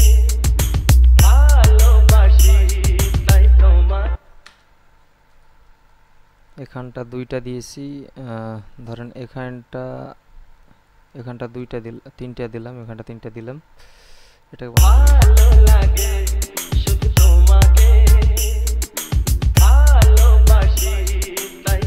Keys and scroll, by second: 4.4 space, 14.9 space.